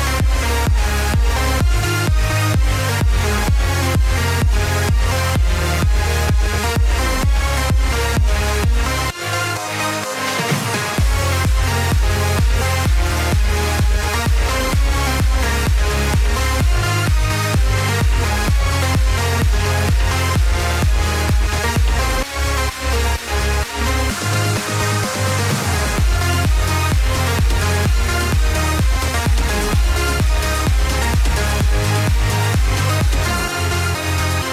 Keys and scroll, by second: 0.3 ctrl++.